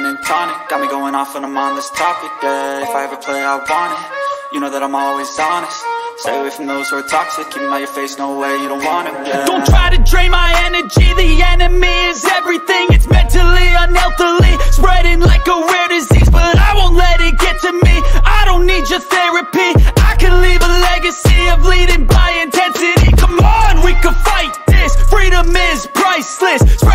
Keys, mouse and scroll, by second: 0.9 click, 4.3 click, 6.0 click, 6.9 click, 7.8 click, 10.0-11.6 typing, 11.6 Return, 13.0 click, 13.7 click, 15.1 click, 17.7 click, 18.6 click, 19.6 click, 20.4 click, 24.3 middle click, 25.0 middle click.